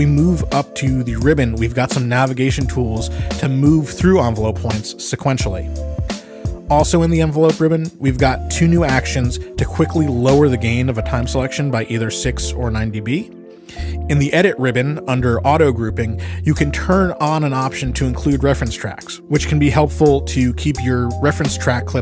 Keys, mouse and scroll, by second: 1.1 click, 3.6 click, 5.7 click, 6.4 click, 7.2 click, 7.9 click, 9.5 click, 10.9-13.0 drag, 14.0 click, 16.7 click, 21.4 click.